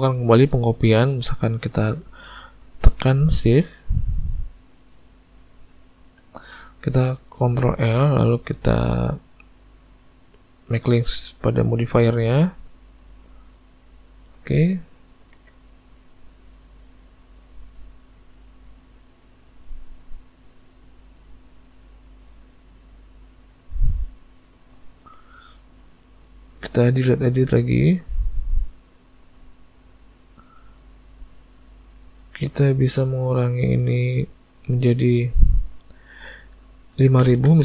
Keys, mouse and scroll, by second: 0.2 middle click, 1.3 middle click, 5.3 shift+click, 7.8 ctrl+l, 15.4 alt+a, 15.7 middle click, 17.0 click, 17.4 middle click, 19.4 click, 21.2 middle click, 22.2 click, 23.3 middle click, 24.5 click, 25.3 click, 27.2 click, 29.0 click, 30.7 middle click, 33.0 middle click, 34.7 click, 37.5 KP_0.